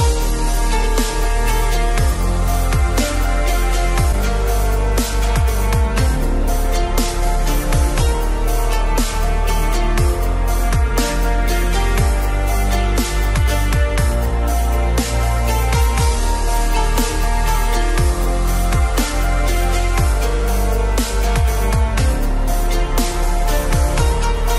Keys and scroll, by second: 2.9 ctrl+0, 22.8 ctrl+alt+z.